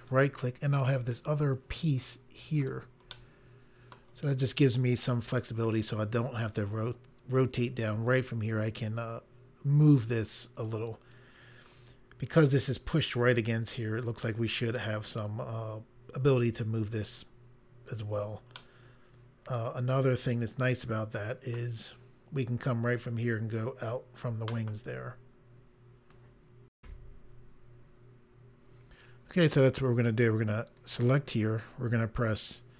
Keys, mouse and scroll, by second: 0.0 right click, 0.9 click, 3.1 middle click, 18.5 middle click, 27.2 Pause, 30.6 click.